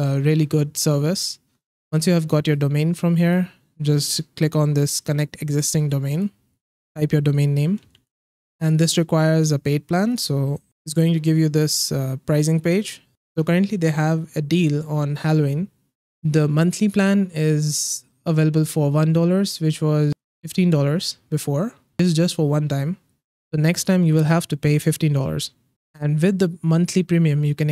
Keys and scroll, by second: 7.5-8.4 typing.